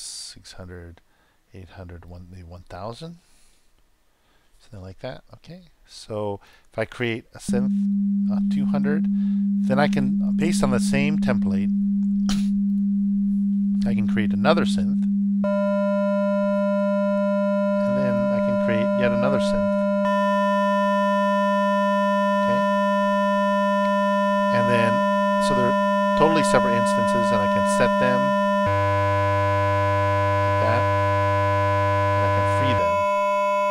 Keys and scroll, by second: 7.4 super+Return, 15.3 super+Return, 19.9 super+Return, 28.6 super+Return, 32.7 super+Return.